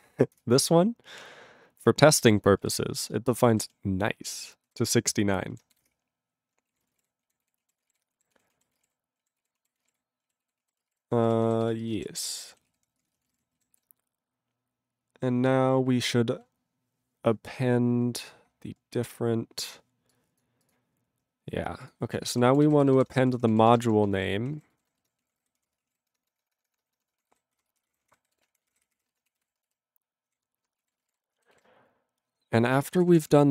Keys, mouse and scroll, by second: 0.4 ctrl+Return, 2.6 ctrl+e, 2.9 ctrl+space, 3.4 ctrl+alt+b, 3.5 ctrl+alt+b, 4.7 ctrl+g, 5.9 Return, 6.8 ctrl+a, 6.9 ctrl+space, 6.9 ctrl+e, 7.0 ctrl+g, 7.4 ctrl+s, 7.6 ctrl+a, 7.8 ctrl+space, 7.8 ctrl+e, 8.3 ctrl+s, 8.5 ctrl+a, 8.7 ctrl+space, 8.7 ctrl+e, 8.8 ctrl+g, 9.5 ctrl+s, 9.6 ctrl+a, 9.7 ctrl+space, 9.8 ctrl+e, 9.9 ctrl+g, 10.4 ctrl+s, 10.6 ctrl+a, 10.8 ctrl+space, 10.9 ctrl+g, 11.0 ctrl+n, 11.3 ctrl+e, 11.6 ctrl+s, 11.9 ctrl+space, 11.9 ctrl+e, 12.2 ctrl+g, 12.2 ctrl+e, 12.7 ctrl+s, 12.8 ctrl+p, 13.0 ctrl+p, 13.1 ctrl+e, 13.1 ctrl+n, 13.2 ctrl+n, 13.3 ctrl+g, 13.7 ctrl+s, 17.6-18.2 scroll up 4, 18.2-18.6 scroll down 8, 18.6 scroll up 7, 18.9-20.0 scroll, 20.1 click, 20.4 click, 20.6 click, 20.7 click, 21.1-21.8 scroll down 8, 21.8 click, 21.9 click, 22.1-30.6 typing, 27.0 Delete, 30.9 ctrl+a, 31.0 ctrl+space, 31.0 ctrl+e, 31.1 ctrl+g, 31.6 ctrl+s, 33.0 ctrl+space, 33.0 ctrl+p, 33.1 ctrl+p, 33.3 ctrl+p.